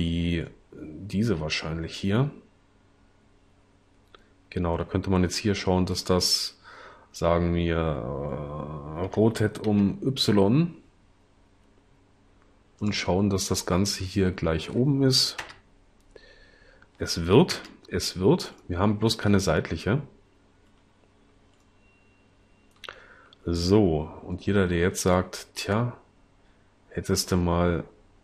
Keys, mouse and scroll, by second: 9.0 r, 9.7 y, 15.6 0.